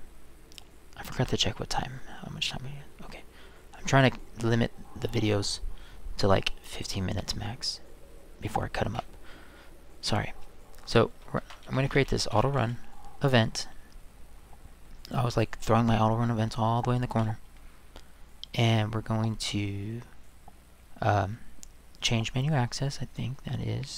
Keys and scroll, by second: 11.2-13.1 typing.